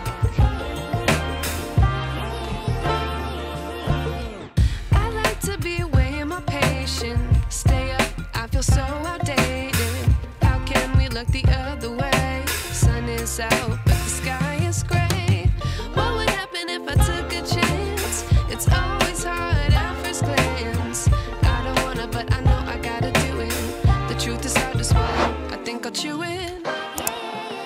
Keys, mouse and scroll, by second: 0.7 scroll up 2, 2.1-3.9 drag, 5.4-5.8 scroll down 2, 5.9 drag, 6.1-7.7 middle drag, 7.7 KP_1, 8.8 scroll up 1, 9.0 click, 9.6-11.0 scroll up 1, 11.0-12.0 scroll up 4, 12.0 KP_0, 14.6-15.7 drag, 15.9 scroll down 2, 16.4 click, 17.0 Tab, 17.6 click, 18.2 click, 18.8 click, 19.2 scroll down 1, 19.8 g, 22.5 Tab, 22.7 scroll down 2, 23.2-25.9 shift+middle drag, 26.3 KP_1, 26.7 scroll up 2.